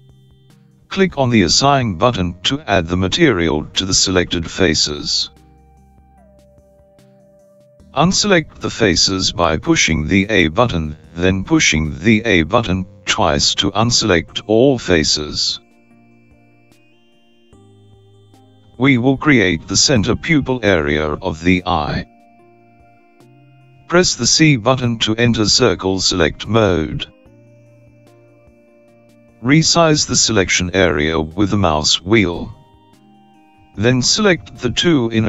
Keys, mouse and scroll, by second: 3.3-3.8 scroll up 3, 3.8 scroll up 4, 5.8 click, 14.4 a, 14.7 a, 15.4 a, 15.6 a, 25.4 c.